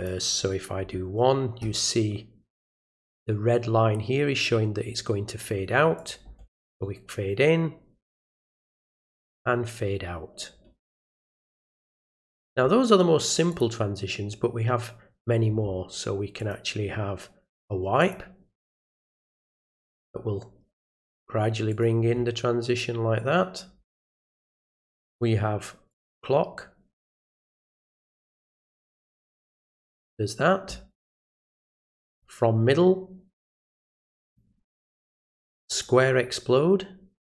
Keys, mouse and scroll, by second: 6.0 click, 11.8 click, 13.5 click, 16.4 click, 18.0 click, 21.7 click, 24.7 click, 25.9 click, 28.3 click, 30.9 click, 32.1 click, 34.2 click, 35.7 click.